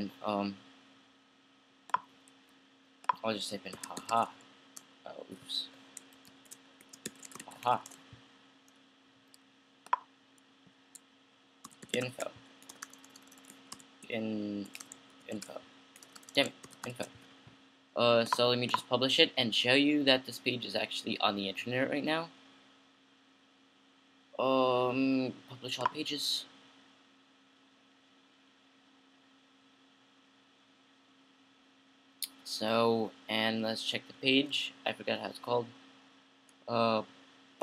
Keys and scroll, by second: 3.7-8.9 typing, 6.5 Left, 11.6-17.5 typing, 19.3-20.1 typing.